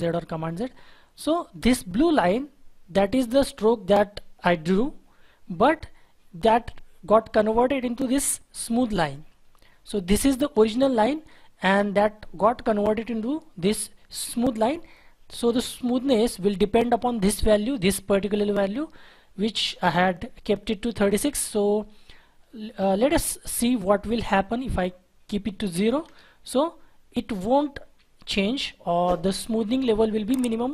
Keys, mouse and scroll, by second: 22.6-25.1 scroll down 1, 26.0 Return, 27.8 Delete, 28.7-30.5 scroll up 1.